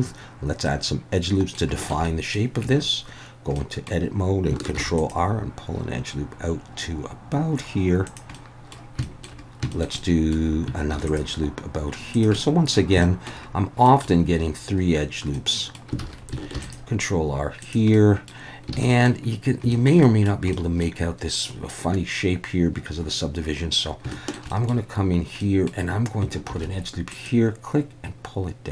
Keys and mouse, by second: 0.6-1.6 middle drag, 1.8 shift+middle click, 2.0 middle click, 2.6 Tab, 3.6 middle click, 4.8 ctrl+r, 8.0 click, 8.5 middle click, 9.1 shift+middle click, 9.8 shift+middle click, 10.1 middle click, 10.9 ctrl+r, 12.1 click, 12.3 middle click, 13.1 shift+middle click, 13.9 middle click, 15.5 middle click, 16.0 alt+a, 16.5 ctrl+r, 17.6 click, 17.9 middle click, 18.7 alt+a, 18.9 middle click, 19.7 shift+middle click, 20.1 middle click, 20.5 middle click, 24.1 shift+middle click, 24.5 middle click, 25.4 middle click, 26.5 ctrl+r.